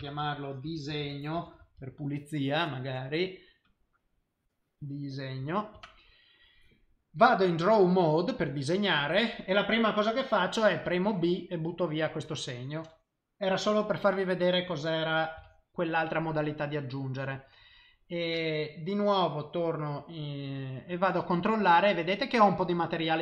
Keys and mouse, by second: 7.2 click, 8.8 middle click, 10.9 b, 14.0 middle click, 15.4 b, 21.3 click.